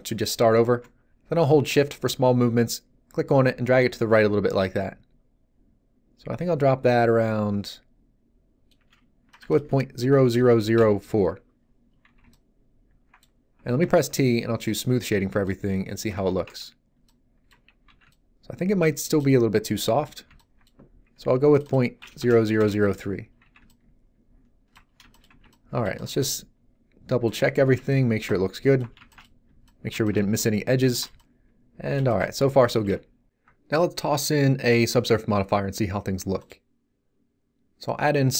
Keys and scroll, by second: 10.4 BackSpace, 10.6 4, 10.7 Return, 12.0 z, 13.8 t, 16.1 z, 16.4 Tab, 17.8 z, 22.1 BackSpace, 22.3 3, 22.5 Return, 23.4 z.